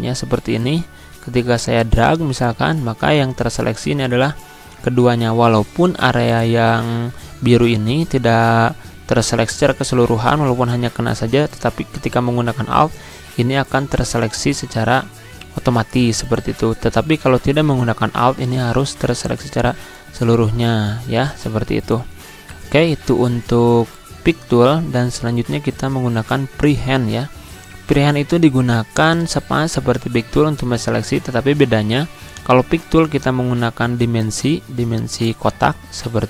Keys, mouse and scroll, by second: 0.3-5.1 alt+drag, 5.1 ctrl+z, 6.0 click, 10.9 click, 11.2-15.1 alt+drag, 15.1 ctrl+z, 16.0 click, 18.5-20.1 drag, 20.8 ctrl+z, 21.5-28.4 drag, 33.9-36.2 drag.